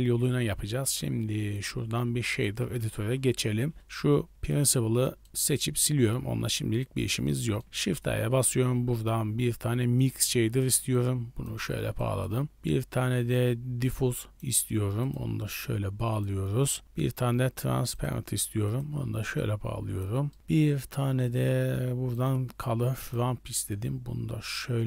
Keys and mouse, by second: 1.5-2.4 drag, 3.3 n, 4.5-4.9 drag, 5.1 middle drag, 5.3 x, 5.6 middle click, 6.8 click, 7.3 middle click, 7.7 shift+a, 10.9-11.5 drag, 11.9 click, 12.4 shift+a, 15.6-16.2 drag, 16.5 shift+a, 19.5-20.0 drag, 20.4 shift+a, 23.7-24.6 drag.